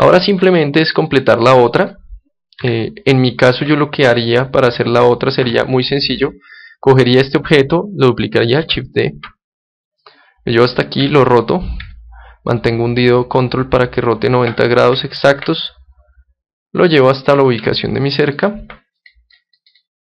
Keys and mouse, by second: 1.0-2.6 middle drag, 2.6 KP_1, 3.6 KP_3, 4.6 KP_9, 5.6 KP_7, 6.1-8.6 middle drag, 8.6 shift+d, 10.1-12.0 drag, 11.0 r, 14.6-17.2 drag, 17.4-19.0 middle drag, 19.0-20.1 drag.